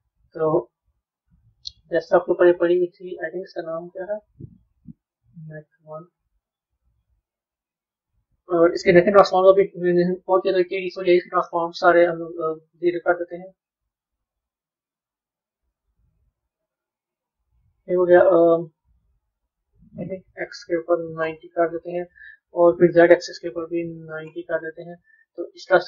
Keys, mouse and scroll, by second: 9.2-12.3 middle drag, 12.8 click, 13.9 click, 15.0-16.5 drag, 16.5 scroll up 2, 17.1-19.8 middle drag, 19.8-25.4 drag, 25.4-25.8 middle drag.